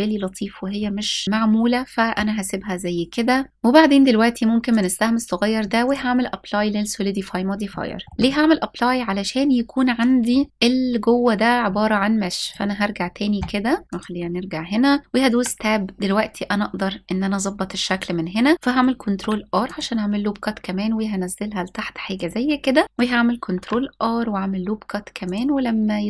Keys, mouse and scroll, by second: 1.2 middle click, 3.5 ctrl+z, 3.5 middle click, 4.3-5.6 drag, 6.8 scroll up 1, 7.7-8.1 shift+middle drag, 8.1-8.7 scroll up 2, 8.9 scroll up 1, 12.1 click, 13.8 click, 15.0 Tab, 18.6 ctrl+r, 21.8 click, 23.1 ctrl+r.